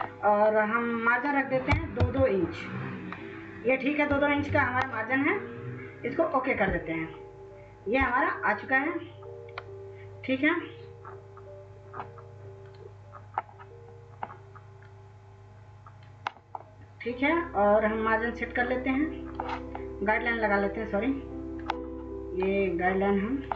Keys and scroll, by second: 2.1-2.9 typing.